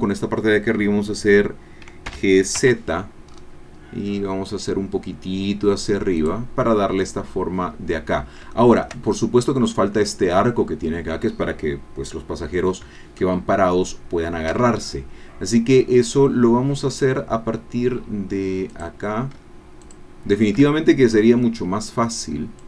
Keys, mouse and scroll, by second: 2.0 g, 2.6 z, 2.8 middle click, 3.3-3.7 scroll up 2, 6.2 click, 8.5 shift+middle click, 13.2-15.0 shift+drag, 20.1 shift+click, 21.4 shift+click.